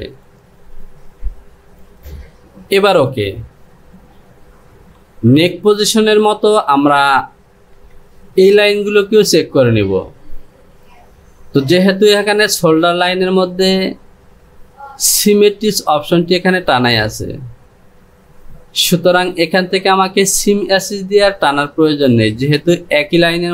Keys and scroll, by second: 5.0 Home.